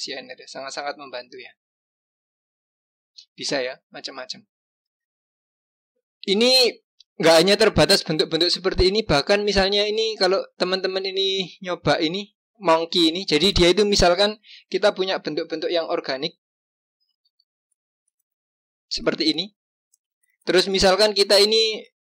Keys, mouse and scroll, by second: 2.2-3.4 scroll down 2, 3.4-3.9 scroll up 1, 3.9-4.3 scroll up 1, 5.3 click, 6.8-10.0 drag, 17.2 g, 20.6-21.9 scroll up 1, 21.9 click.